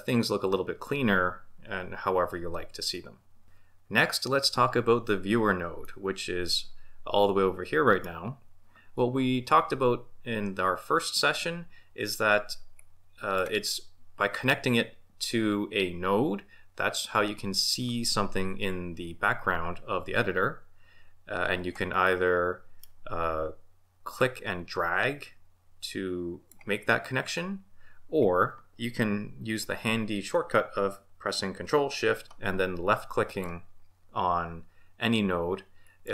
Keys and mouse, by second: 5.8-8.2 middle drag, 12.7-13.4 drag, 22.0-22.8 middle drag, 24.1 click, 25.4-26.5 drag, 33.3 ctrl+shift+click, 35.8 ctrl+shift+click.